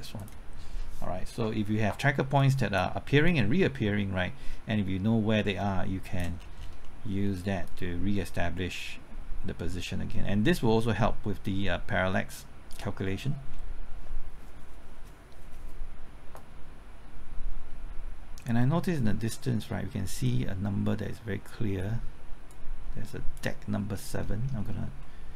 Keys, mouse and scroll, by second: 0.2 click, 3.3-6.4 drag, 6.4-6.7 scroll down 1, 6.8 middle click, 7.6-13.0 drag, 13.0-13.5 scroll up 1, 13.5 middle click, 16.3-22.4 drag, 23.8-24.2 scroll up 1, 24.2 middle click, 24.6-25.0 scroll up 1, 25.0 middle click.